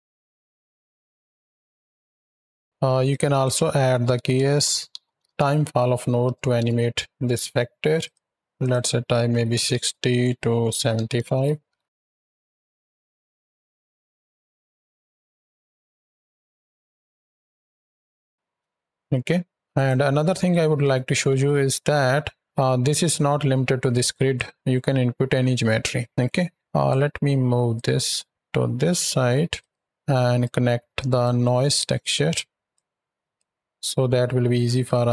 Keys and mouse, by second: 2.3 space, 2.6 x, 2.9-3.3 drag, 7.8 click, 8.4-11.1 drag, 11.5 shift+Right, 11.7 shift+Left, 11.9 space, 18.3 space, 18.6-19.5 drag, 19.6 click, 20.2 click, 22.4-24.2 drag, 26.0 drag, 26.6 click, 27.6-29.3 drag, 29.4 click, 30.0 right drag, 30.8 right drag, 31.3 right click, 32.6-33.2 drag, 33.9 middle drag, 34.6 right click.